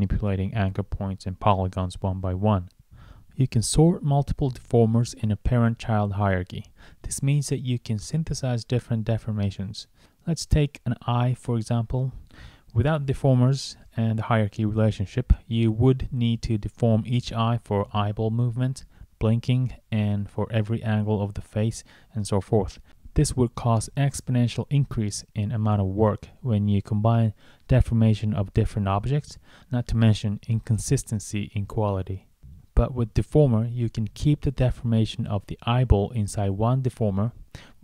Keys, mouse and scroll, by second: 2.1 scroll down 1, 2.9 scroll down 1, 3.6 scroll up 1, 4.3 click, 5.6 click, 7.4 right click, 8.1 right click, 8.8 right click, 9.2 right click, 10.6 click, 11.2 click, 12.2 click, 15.4 click, 16.5 scroll up 1, 18.1 click, 19.0 right click, 19.6 click, 20.8 click, 22.2 right click, 22.8 right click, 25.0 click, 26.8 scroll up 1, 29.3 click, 32.6 click, 34.4 right click, 35.4 click, 37.4 right click.